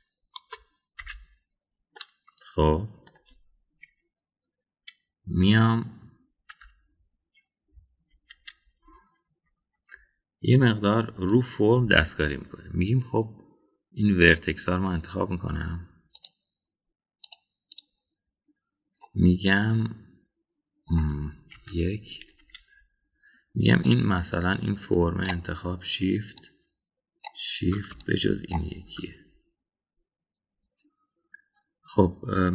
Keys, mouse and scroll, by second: 1.3 Escape, 2.0 /, 3.0-4.1 middle drag, 7.4 KP_1, 9.0 KP_3, 10.7 Tab, 15.2 click, 17.2 click, 18.2 click, 18.6 click, 20.0-21.9 middle drag, 22.5 KP_1, 23.3 KP_3, 24.8-28.3 drag, 29.0 ctrl+click.